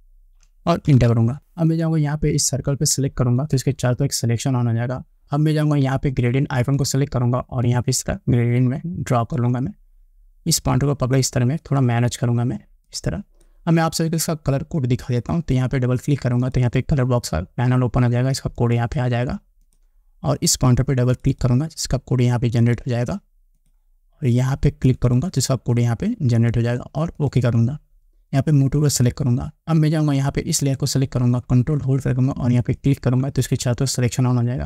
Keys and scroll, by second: 1.1 Return.